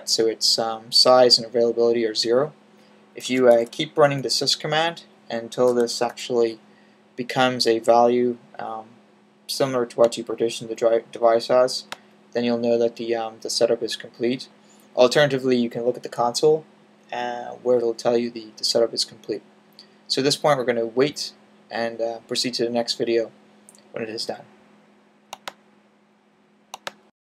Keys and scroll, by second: 3.2 typing, 5.5 typing.